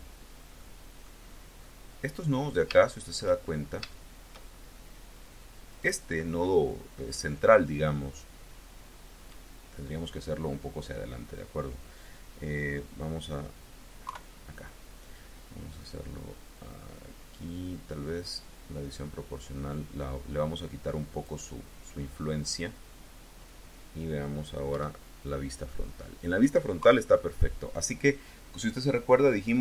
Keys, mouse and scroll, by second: 1.4 middle click, 1.6-3.2 drag, 3.3-3.7 shift+scroll up 3, 3.7 shift+click, 5.6 click, 6.5-9.2 drag, 13.9 KP_3, 15.8-17.2 drag, 17.2-17.7 scroll up 2, 22.8-23.3 scroll down 2, 24.6 KP_1, 26.6 KP_3.